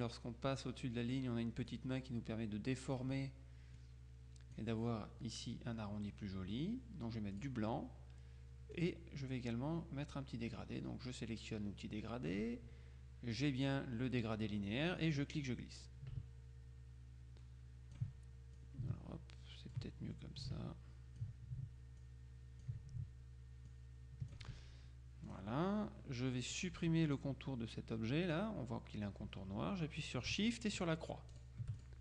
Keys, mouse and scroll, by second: 1.8-3.5 drag, 3.9 click, 7.5 click, 8.9 click, 15.3-18.5 drag, 18.7-20.3 ctrl+drag, 20.5 ctrl+click, 22.1 click, 23.7 click, 25.3 click, 26.6 click, 31.4-32.0 shift+drag.